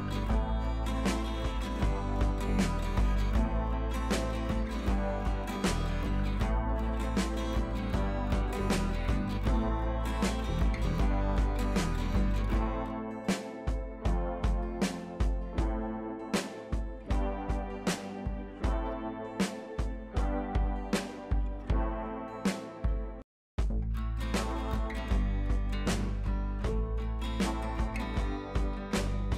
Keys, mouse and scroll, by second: 0.9 scroll down 1, 1.3 scroll up 1, 2.8 click, 3.1 shift+click, 3.4-3.8 scroll down 2, 4.4 Down, 5.4 Left, 5.9 Right, 7.0 click, 7.8 Down, 9.2 click, 9.4 Down, 11.0 click, 11.7 shift+click, 12.5 Down, 13.9 click, 14.6 scroll down 1, 16.4 scroll up 1, 16.8 click, 17.4 ctrl+l, 18.4-20.1 drag, 21.7 ctrl+l, 22.6-24.0 drag, 26.2-26.5 scroll down 1, 27.4 ctrl+j, 28.7 scroll down 1.